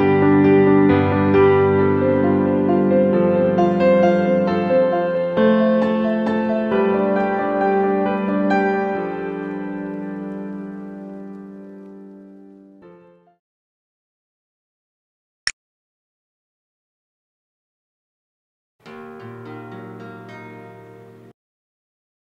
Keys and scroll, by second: 11.3 z.